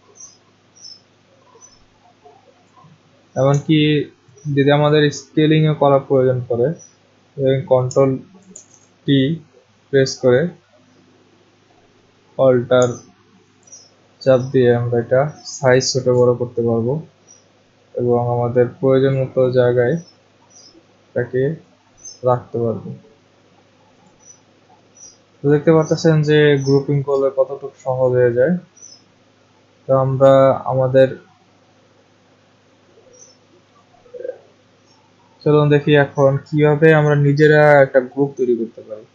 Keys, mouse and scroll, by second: 2.6 click, 8.5 ctrl+t, 15.9 alt+click, 21.5 click, 24.1 click, 29.9 click, 33.8 click.